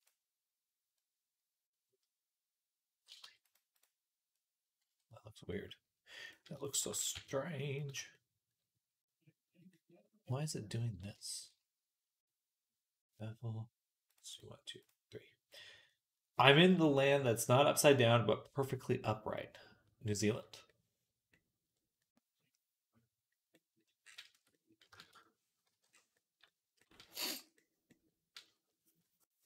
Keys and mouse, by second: 3.1 Tab, 6.5 shift+click, 6.8 g, 14.0-25.5 drag, 24.2 Tab, 25.7 click, 25.7 middle click, 25.7 right click, 25.7 /, 26.1 click, 26.1 middle click, 26.1 right click, 27.2 ctrl+s.